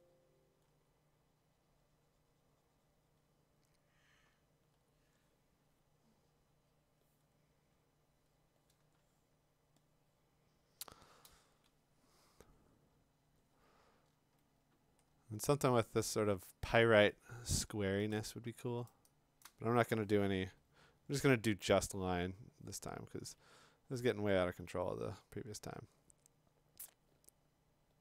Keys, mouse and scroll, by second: 4.8 x, 5.6 x, 9.5-10.6 click, 10.7 click, 11.3 click, 12.7-14.3 scroll, 15.0-15.5 scroll, 16.1-17.0 scroll, 17.0 middle click, 18.1 click, 18.8 click, 18.9 click, 19.0 click, 19.3 scroll, 19.4-22.4 click, 20.3 [, 21.1 [.